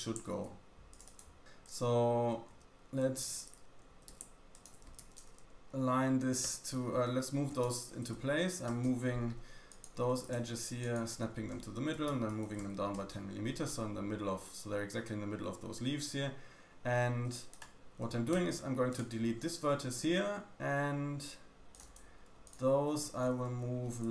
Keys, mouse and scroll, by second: 0.2 ctrl+r, 1.4 q, 1.6 click, 2.4 g, 3.8 g, 4.7 g, 6.4 Escape, 7.4 g, 9.6 click, 10.0 g, 11.9 g, 17.1 1, 17.4 click, 18.3 x, 21.6 click, 22.4 ctrl+click, 23.2 g.